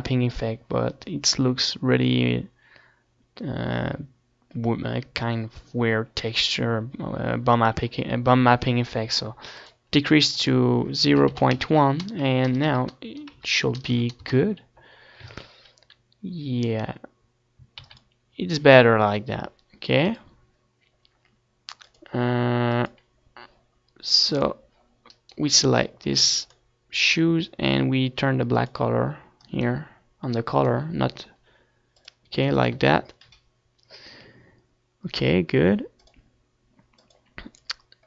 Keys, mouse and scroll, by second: 3.7-6.2 middle drag, 11.9-14.3 drag, 17.4 ctrl+s, 19.9 ctrl+s, 21.1-23.0 middle drag, 21.9 ctrl+s, 23.9-32.5 drag, 27.4-29.6 right drag, 34.2-36.0 drag.